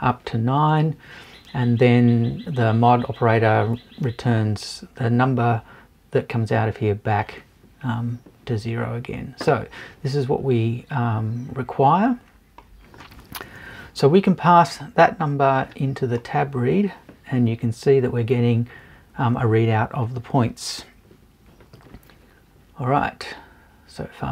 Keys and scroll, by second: 13.5 BackSpace.